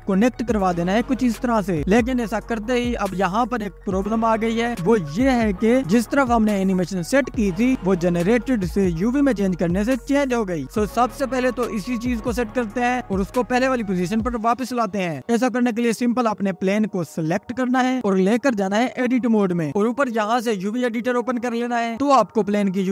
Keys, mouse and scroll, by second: 1.3 click, 7.6-10.2 drag, 15.6 click, 17.9 Tab, 19.5 scroll down 2, 20.2 a.